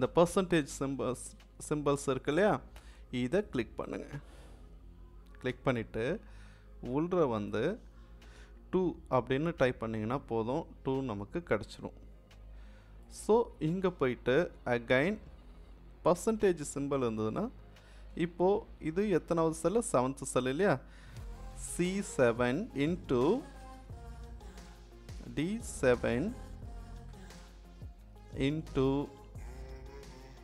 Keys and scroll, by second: 8.3 2, 16.2 =, 21.8 c, 22.7 shift+8, 25.2 d, 26.5 7, 28.0 shift+8.